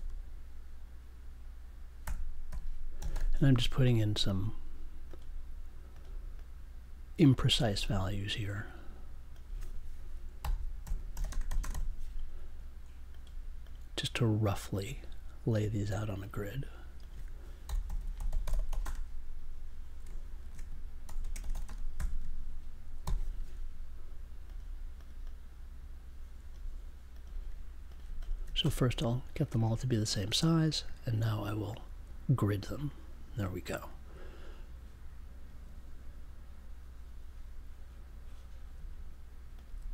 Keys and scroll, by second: 1.7-3.6 typing, 10.4-12.2 typing, 17.4-19.0 typing, 20.5-22.4 typing, 23.0 super+j.